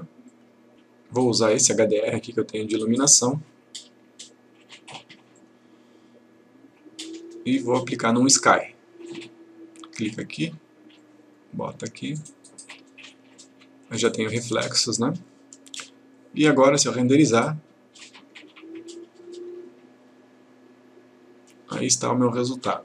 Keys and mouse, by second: 0.4 click, 2.1 click, 5.5 click, 7.7 click, 17.1 click.